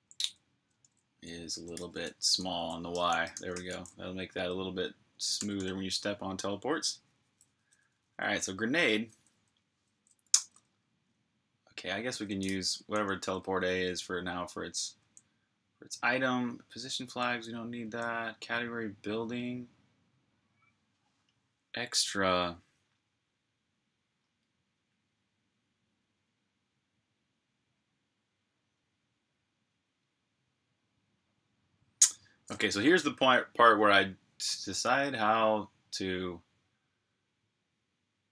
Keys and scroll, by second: 0.0-3.8 typing, 5.2 g, 7.8-10.4 typing, 12.2-15.3 typing.